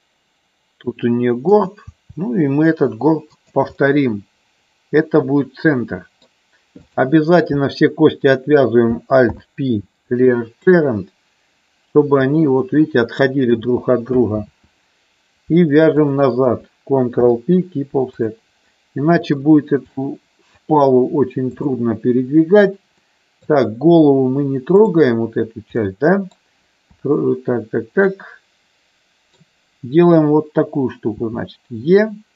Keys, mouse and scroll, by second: 1.6 click, 1.9 e, 3.3 click, 3.8-6.4 middle drag, 6.9 click, 9.2 alt+p, 12.3-13.5 drag, 14.4 ctrl+z, 16.0 shift+click, 17.1 ctrl+p, 18.7 middle click, 20.0 middle click, 21.5 click, 23.1 middle click, 25.7 middle click, 26.8 KP_3, 28.1-29.4 middle drag, 31.1 e.